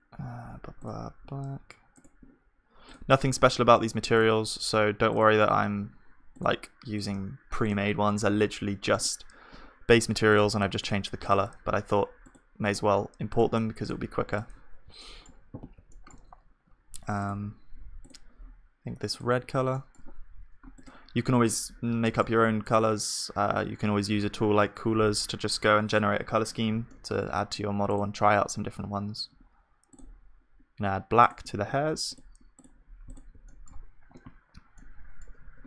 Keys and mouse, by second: 3.8 middle click, 14.6 middle click, 19.7-32.9 middle drag, 35.4 KP_1.